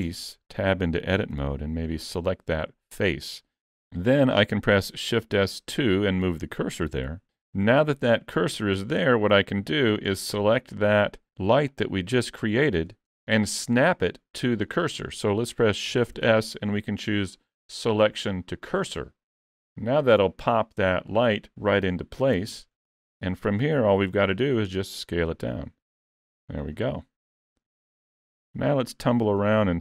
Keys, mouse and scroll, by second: 0.0 Tab, 0.4 scroll up 3, 1.3 3, 1.9 click, 7.3 Tab, 10.1 scroll down 3, 10.8 middle click, 10.8 scroll down 7, 11.7 click, 13.2 middle click, 14.4 scroll up 1, 14.7 shift+middle click, 15.0 shift+scroll up 1, 16.2 shift+s, 22.4 KP_Decimal, 23.0-24.2 scroll down 2, 24.2 scroll down 2, 24.2 s, 27.0-27.4 scroll down 4, 27.4 middle click, 27.7 alt+a.